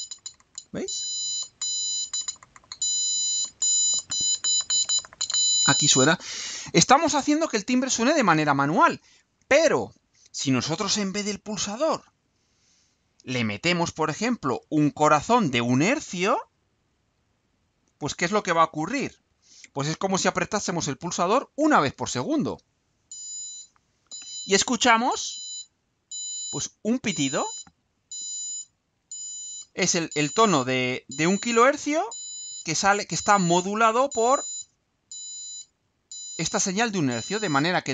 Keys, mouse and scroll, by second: 14.9 click, 17.4 click, 19.3 ctrl+u.